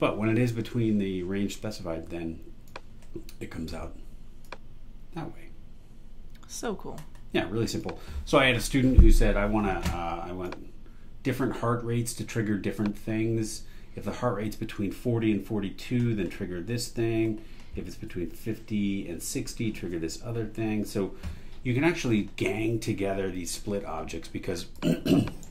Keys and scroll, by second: 25.4 super+e.